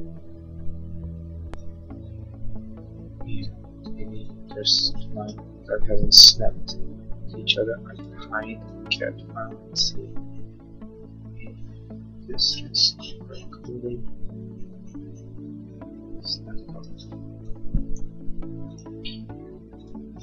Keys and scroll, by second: 3.9 space, 8.5 h, 17.2 e.